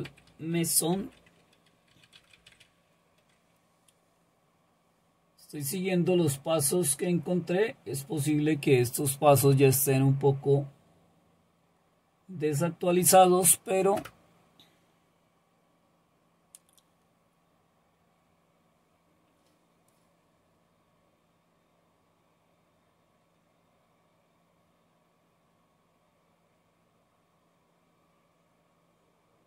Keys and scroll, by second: 0.0-3.0 typing, 14.0 Return.